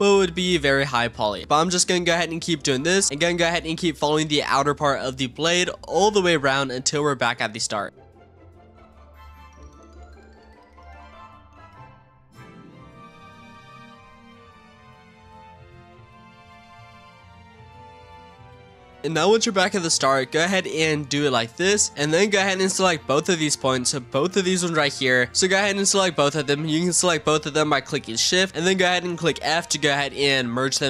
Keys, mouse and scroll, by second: 0.8 ctrl+z, 1.0 ctrl+z, 1.2 ctrl+z, 1.4 shift+middle click, 1.9 e, 2.8 e, 3.4-3.8 shift+middle drag, 3.8 e, 4.7 e, 5.5 e, 6.6-16.5 typing, 8.0 shift+middle drag, 10.4 shift+middle drag, 11.6 shift+middle drag, 12.6 shift+middle click, 14.1 shift+middle click, 14.5 ctrl+z, 15.8 shift+middle click, 17.0 scroll up 1, 17.1 shift+middle click, 18.4 e, 20.2 e, 22.7 click, 23.8 shift+click, 26.1 click, 27.9 shift+click, 28.5 f, 29.3 ctrl+z, 30.2 f.